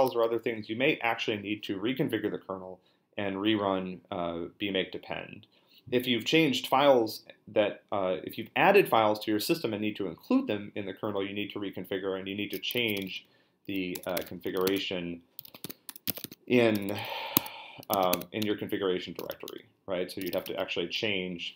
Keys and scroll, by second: 12.7-20.9 typing, 15.6 Tab, 17.3 Tab, 19.5 Return.